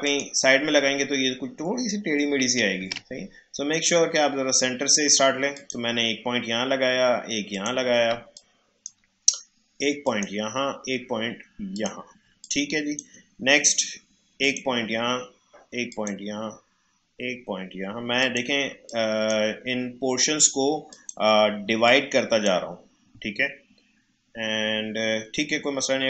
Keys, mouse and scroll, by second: 0.0 click, 2.8 ctrl+z, 5.5 click, 8.1 space, 8.3 click, 8.6 space, 10.0 click, 12.2 space, 12.4 click, 12.7 space, 14.4 click, 18.7 space, 18.8 click, 19.2 space, 20.9 click, 21.6 space, 21.8 click, 22.1 space.